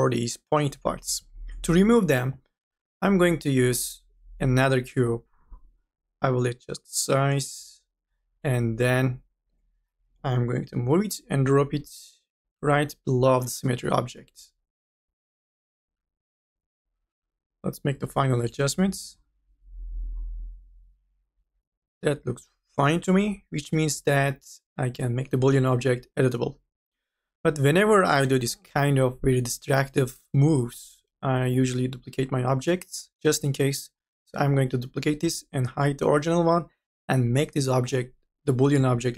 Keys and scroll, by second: 9.9 e, 37.9 c.